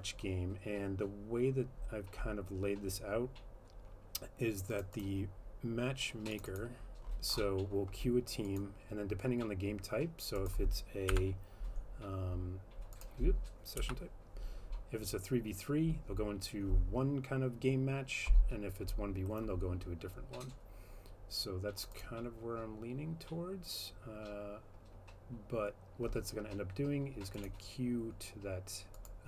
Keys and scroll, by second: 11.1 F12, 13.8 F12.